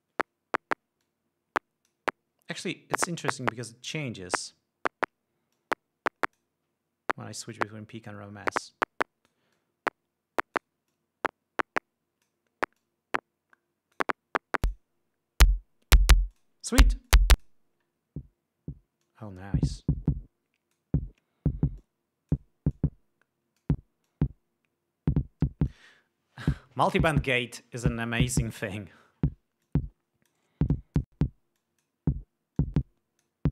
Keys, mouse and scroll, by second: 1.6 click, 4.0 click, 6.1 click, 9.1-10.1 drag, 10.1-11.4 drag, 11.5-13.0 drag, 13.4-14.7 drag, 15.2 click, 16.9 click, 17.7-18.2 drag, 19.6-21.5 drag, 22.4-23.1 drag, 23.3-24.4 drag, 24.7-26.5 drag, 30.2-31.1 drag, 31.3-31.8 drag, 32.1-32.6 drag, 33.1-33.5 drag.